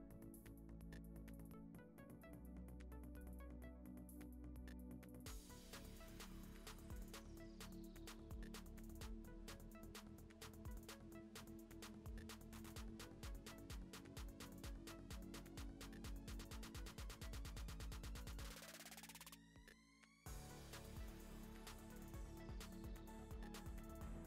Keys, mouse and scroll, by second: 0.2 alt+d, 1.4 g, 2.2 alt+d, 2.9 alt+d, 4.3 g, 5.6 click, 5.9 g, 7.1 alt+d, 7.7 alt+d, 8.3 g, 8.7 g, 9.2 alt+d, 10.6 alt+d, 11.5 alt+d, 12.0 g, 12.3 g, 13.1 shift+middle click, 13.3 click, 13.5 g, 14.2 alt+d, 15.4 click, 15.7-18.7 typing, 16.8-17.2 middle drag, 17.8 scroll down 1, 17.9 middle click, 18.9 scroll up 4, 19.3-19.8 drag, 19.8 g, 20.6 middle drag, 20.8 Tab, 20.9 s, 21.8 click, 21.9 middle click, 22.0 scroll down 4, 22.1 e, 22.6 click, 22.7 ctrl+b, 23.6 a, 23.8 Tab, 23.8 right click, 24.1 middle drag.